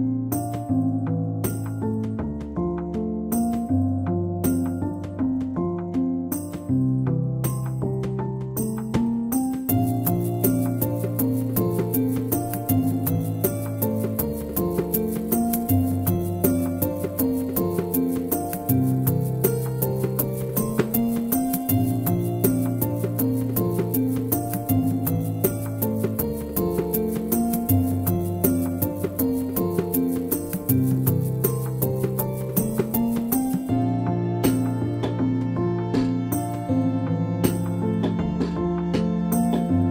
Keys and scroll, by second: 38.9 ctrl+c.